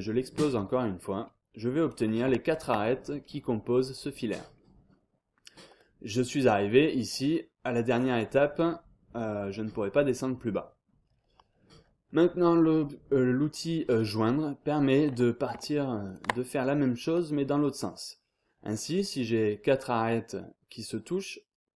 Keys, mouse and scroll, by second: 0.5 click, 1.2-1.7 scroll down 1, 1.8 click, 2.5 shift+click, 3.0 shift+scroll down 1, 3.2-3.9 scroll up 1, 4.5 scroll down 1, 4.8-5.3 scroll up 1, 5.7 click, 7.1 click, 7.9 scroll down 1, 8.1-8.6 scroll up 1, 10.4 scroll down 1, 10.6-11.2 scroll up 1, 15.0 click, 16.0 shift+click, 16.8 scroll down 1, 17.0-17.5 scroll up 1, 17.5 scroll down 2, 17.7-18.3 scroll up 2, 19.2 scroll down 2, 19.4-20.0 scroll up 2.